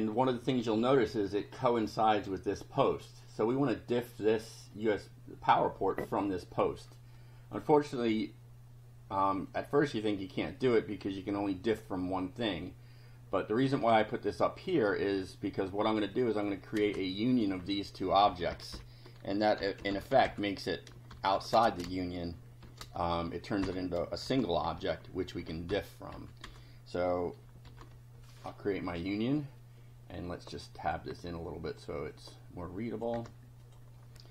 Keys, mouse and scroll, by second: 0.1 click, 2.9 click, 7.1 click, 9.5-10.8 drag, 13.6 click, 16.1 click, 16.9 space, 17.3 click, 18.2 Left, 19.2-24.2 typing, 24.7 shift+Down, 26.1 Up, 26.4 Return, 27.6 shift+], 30.2 click, 31.1 Tab, 31.7 click, 32.1-33.1 drag, 33.1 Tab, 33.6 click.